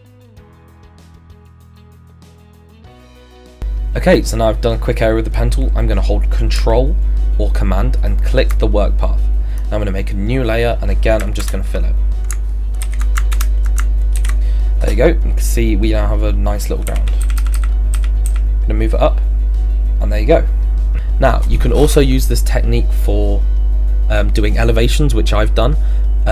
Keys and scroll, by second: 1.5 ctrl+z, 11.4 alt+BackSpace, 12.8 ctrl+z, 13.3 ctrl+BackSpace, 14.2 ctrl+d, 16.9 d, 17.2 Up.